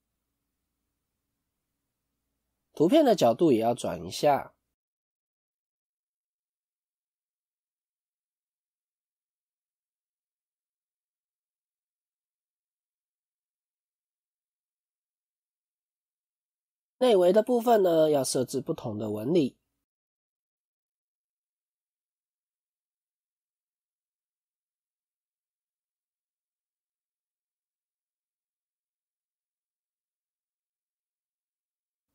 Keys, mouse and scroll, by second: 1.4 click, 11.1-11.5 scroll up 5, 12.0-13.9 scroll down 3, 20.0 click, 21.3 click, 21.8 middle click, 23.0 Tab, 23.0 scroll up 3.